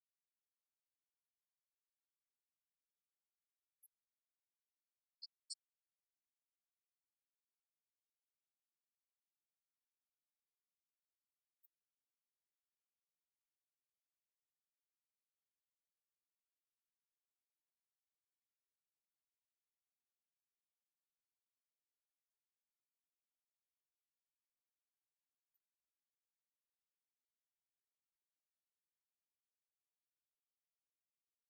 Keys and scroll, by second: 1.6 Return.